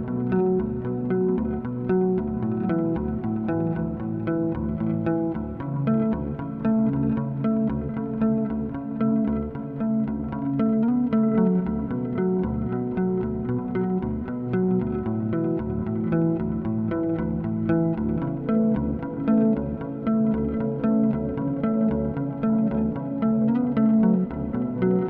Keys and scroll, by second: 5.1 2, 9.4-10.4 typing.